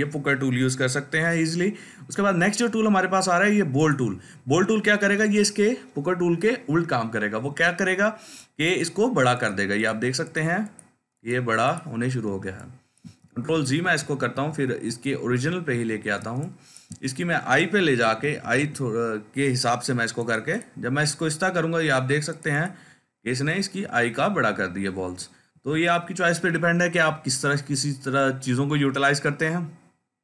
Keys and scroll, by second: 13.1 ctrl+z, 13.4-16.7 ctrl+z, 18.0 [, 18.1 [, 18.3 [, 18.5 [, 24.0 ctrl+z, 24.4 ctrl+z.